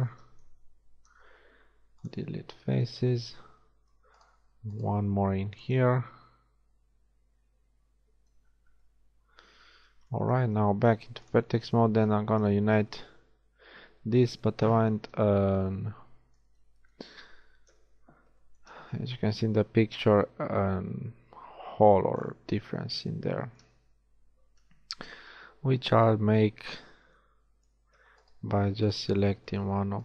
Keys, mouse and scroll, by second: 1.1 x, 2.5 z, 3.0 z, 5.1 x, 5.9 z, 10.4 ctrl+Tab, 17.7 KP_1, 18.9 z, 26.6-27.9 middle drag.